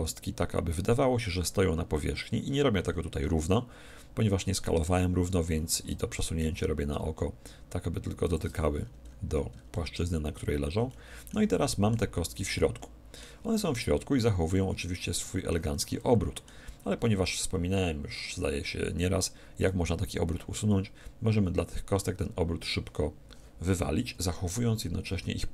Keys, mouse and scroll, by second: 1.9-5.5 middle drag, 6.0 g, 8.3-10.0 drag, 8.8-17.6 middle drag, 12.1 z, 22.1 z.